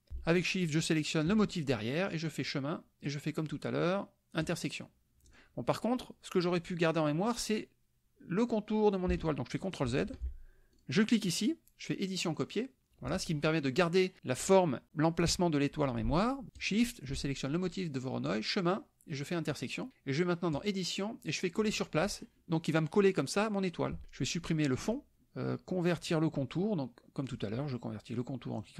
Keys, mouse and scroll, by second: 0.6 shift+click, 2.3 click, 4.4 click, 5.2 click, 9.9 ctrl+z, 10.7 ctrl+click, 12.3 click, 12.8 drag, 16.5 shift+click, 18.2 click, 19.5 click, 20.6 click, 22.0 click, 24.8 click, 27.3 click, 28.5 click.